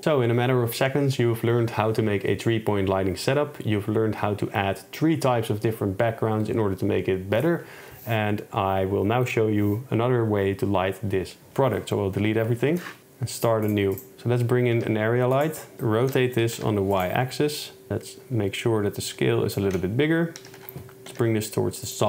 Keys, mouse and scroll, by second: 13.0 ctrl+s, 13.7 click, 14.1-16.6 typing, 15.7 shift+Tab, 17.0 click, 17.9 ctrl+click, 20.5 g, 20.6 y, 21.2 x.